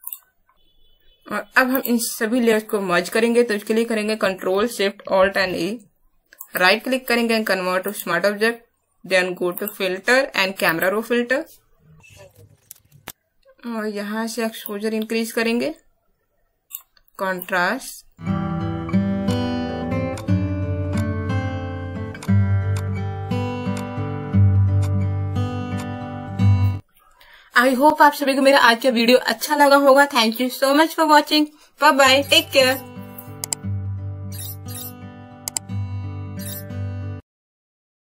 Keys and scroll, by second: 5.1 ctrl+alt+shift+e.